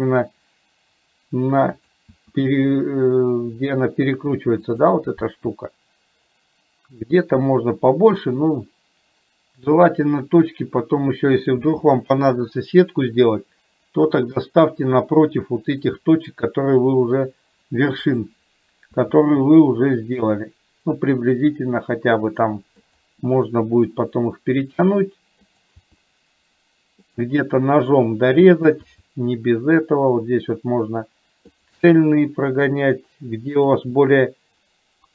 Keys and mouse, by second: 2.2 e, 19.1 e, 25.9 e, 31.9 e.